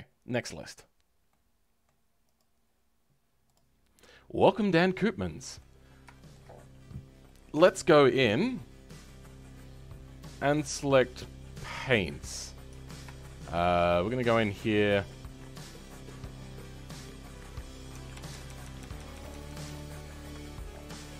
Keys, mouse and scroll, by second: 5.8-6.1 scroll up 2, 6.1-8.6 shift+middle drag, 8.6-9.7 scroll up 4, 9.7-12.6 middle drag, 12.6 Tab, 13.1-16.5 shift+middle drag, 16.5 click, 18.1-18.9 ctrl+KP_Add, 19.1 ctrl+KP_Add, 20.9-21.1 middle drag.